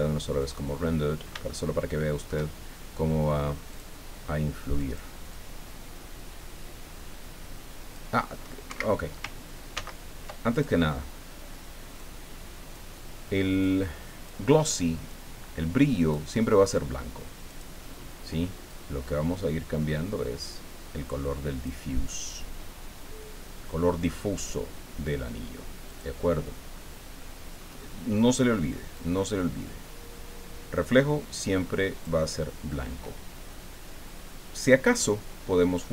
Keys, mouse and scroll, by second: 0.4 click, 1.5 shift+click, 3.7 click, 4.8 click, 5.3-8.1 drag, 8.7 Escape, 9.7 ctrl+z, 10.5 ctrl+click, 12.0 click, 13.6 click, 15.1-16.3 drag, 17.5 click, 18.7-21.9 drag, 22.3-22.8 scroll down 1, 25.9 click, 27.6-28.1 scroll up 1, 28.1 scroll up 1, 29.0-32.2 drag, 34.6 click.